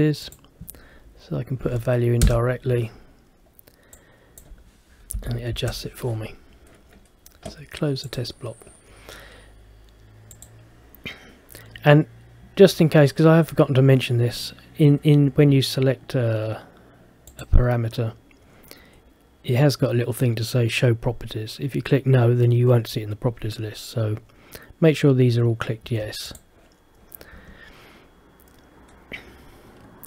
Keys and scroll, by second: 2.3 Return, 5.6 Return, 15.5 Escape, 26.0 Escape, 27.4 Escape.